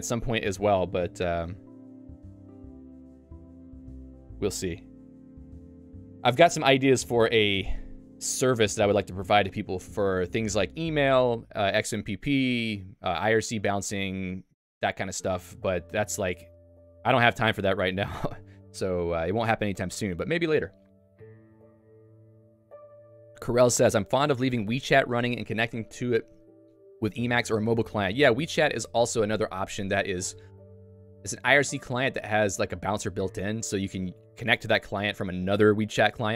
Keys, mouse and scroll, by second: 7.3 super+4.